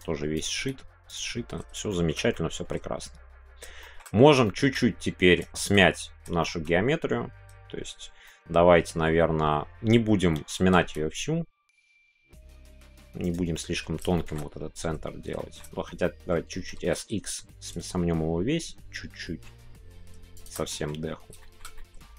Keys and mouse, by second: 1.1 right click, 1.1 g, 1.9 middle click, 2.3-3.6 middle drag, 3.8 shift+middle click, 4.4 shift+middle click, 4.7-5.7 middle drag, 5.9 middle click, 6.4 shift+middle click, 8.2 middle click, 13.2 right click, 13.6 middle click, 14.1-15.6 shift+middle drag, 16.0 middle click, 17.7 shift+x, 20.3 shift+click, 20.7 middle click, 21.4 shift+middle click, 21.7-22.1 middle drag.